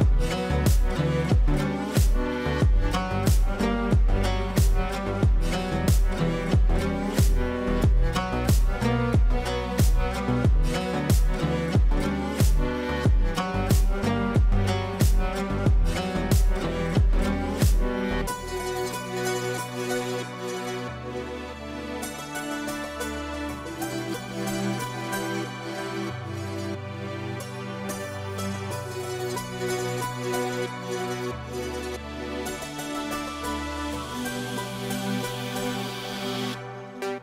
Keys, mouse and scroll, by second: 1.4-1.9 typing, 5.9-6.9 typing, 7.9 ctrl+space, 9.0 F4, 12.3-12.8 drag, 15.6-17.5 drag, 20.2 shift+Num_Lock, 20.2 click, 21.2 b, 22.2-31.0 drag, 30.0-31.3 ctrl+drag, 31.0 ctrl+right click, 31.8 F2, 32.6-32.9 click, 33.5 ctrl+space.